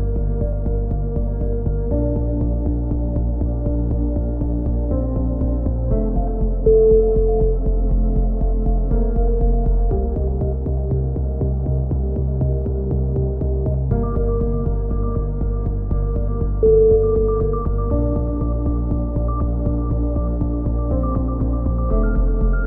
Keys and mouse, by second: 0.5 click, 0.5 right click, 0.7 g, 2.6 right click, 3.4 KP_3, 3.9 click, 4.5 a, 5.3 a, 5.5 a, 5.6 z, 5.7 click, 6.7 click, 6.7 KP_7, 6.8 right click, 7.3 click, 7.3 e, 7.8 s, 8.1 click, 9.0 a, 9.1 z, 9.4 click, 12.7 click, 13.1 right click, 13.7 KP_7, 13.9 a, 14.1 click, 15.2 ctrl+r, 16.5 a, 16.8-18.2 right drag, 18.2 click, 18.7 a, 19.8 click, 20.8 right click, 21.4 e, 21.9 s.